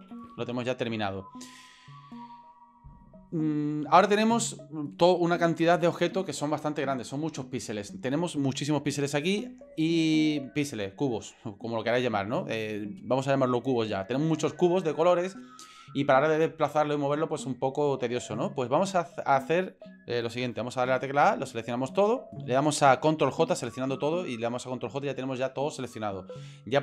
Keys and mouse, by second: 0.0 KP_7, 0.9-1.4 shift+middle drag, 20.9 a, 22.3-23.1 middle drag, 23.2-23.5 shift+middle drag, 23.9 right click.